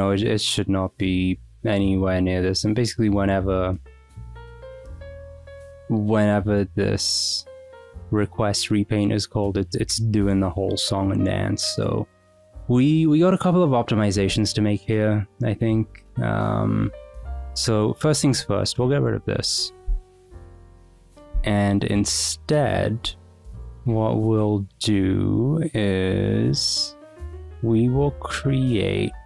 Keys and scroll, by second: 20.1 d, 20.4 Escape, 20.8 Return, 23.0 g.